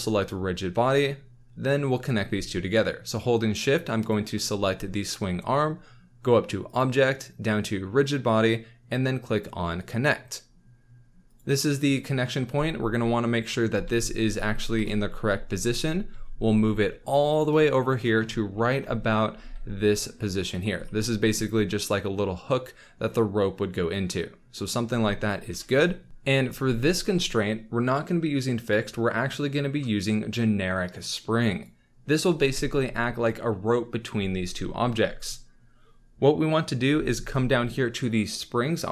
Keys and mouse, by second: 0.3-2.3 drag, 6.6-9.9 drag, 12.5 z, 13.6 z, 14.7 KP_1, 16.1 g, 19.3 g, 20.5 click, 25.5 KP_1, 26.1 ctrl+s, 28.6-31.6 drag.